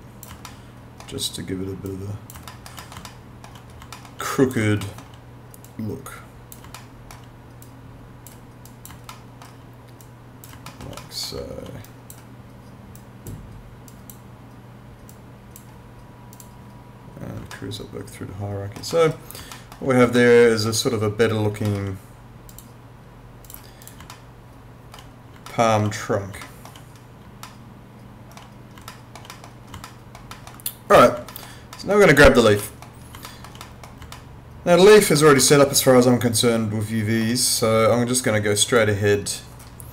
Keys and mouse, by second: 0.5 alt+middle click, 1.9 click, 2.5 alt+middle click, 3.1 alt+middle click, 3.9 alt+middle click, 4.3 click, 4.8 alt+middle click, 5.7 click, 6.8 alt+middle click, 7.7 click, 9.1 alt+middle click, 10.0 click, 10.7 alt+middle click, 11.9 click, 17.5 alt+middle click, 19.5 alt+middle click, 20.2 alt+middle click, 21.7 alt+middle click, 22.5 click, 24.1 alt+middle click, 25.5 alt+middle click, 26.5 alt+middle click, 27.5 alt+middle click, 28.9 alt+middle click, 29.9 alt+middle click, 30.9 click, 31.3 alt+middle click, 33.3 alt+middle click, 34.1 alt+middle click, 35.5 alt+middle click, 38.7 click.